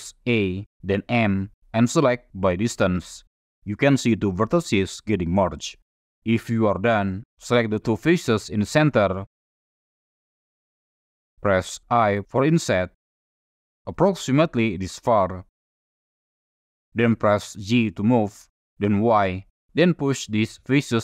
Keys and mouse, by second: 0.2 a, 1.2 m, 7.3 3, 8.0 click, 8.8 shift+click, 9.3 middle click, 10.9 middle click, 12.0 i, 15.2 click, 15.6-16.8 drag, 17.8 g, 19.2 y.